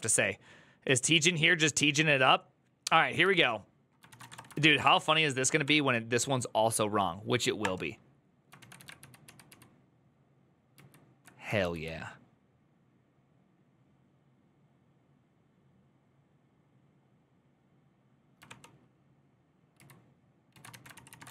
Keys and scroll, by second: 3.1 alt+{, 3.7-5.0 typing, 5.4 Up, 7.4 Return, 8.4 ctrl+a, 8.5 [, 8.8 ctrl+u, 9.0 ctrl+u, 10.5 ctrl+u, 18.2 ctrl+d, 19.5 ctrl+u, 20.3 ctrl+a, 20.5-21.3 typing, 20.7 ctrl+c.